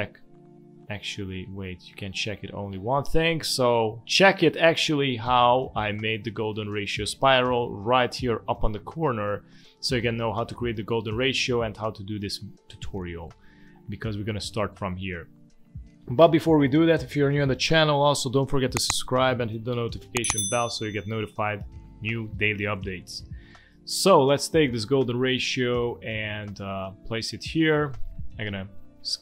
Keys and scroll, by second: 24.3 space, 27.2 space.